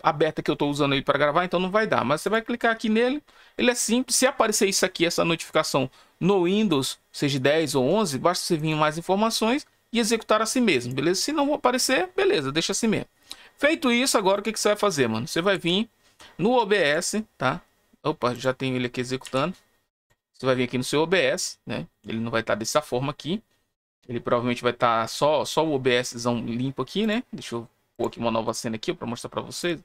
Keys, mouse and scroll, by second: 2.2 click, 8.5 click, 10.7 click, 12.6 click, 14.3 click, 16.8 click, 18.3 click, 19.9 click, 27.0 click, 27.9 click, 28.4 click, 29.5 click.